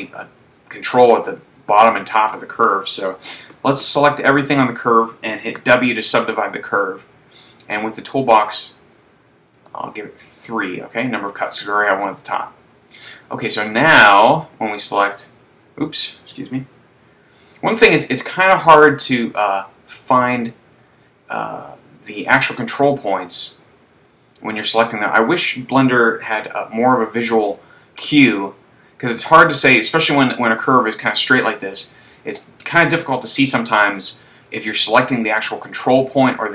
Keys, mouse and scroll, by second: 3.8 a, 3.9 a, 5.7 w, 8.9 click, 9.6 click, 13.9 right click, 15.1 click, 17.3 super+z, 18.1 right click, 19.7 click, 26.6 super+z, 27.8 shift+middle click, 28.5-29.0 scroll up 2, 29.3-29.7 scroll up 2, 32.9 right click, 33.3-33.7 scroll down 2, 34.8 shift+middle click.